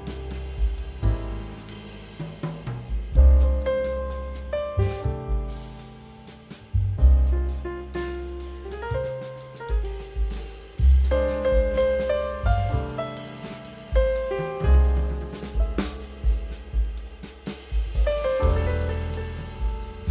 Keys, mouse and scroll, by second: 2.1 scroll up 1, 4.0 scroll down 1, 5.4 scroll up 1, 9.0 scroll down 1, 9.5 scroll up 1, 9.9 ctrl+z, 12.7 double click, 17.2 right click.